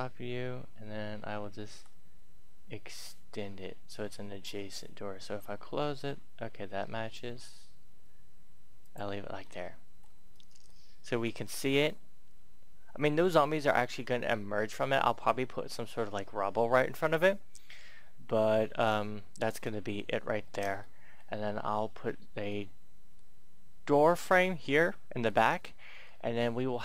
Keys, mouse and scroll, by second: 1.5 e, 8.6 click, 9.4 middle click, 10.3-10.6 scroll down 1, 10.6-12.3 middle drag, 12.3-15.4 scroll up 1, 17.0-19.7 scroll down 1, 19.8 shift+middle click, 20.7-24.0 middle drag, 26.0-26.8 scroll up 1.